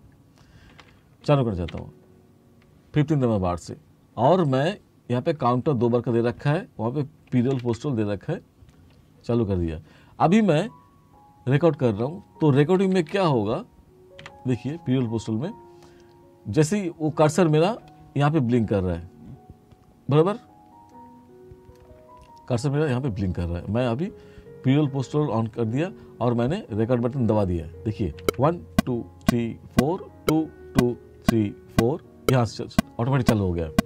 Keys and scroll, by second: 0.8 r, 7.6 ctrl+k, 12.9 t, 28.3 3.